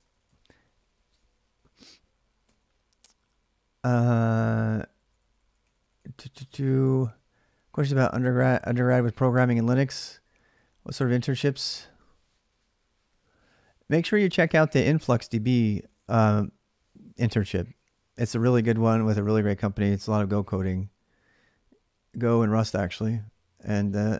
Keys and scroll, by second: 0.0-0.7 typing, 2.2 k, 4.3-6.1 typing.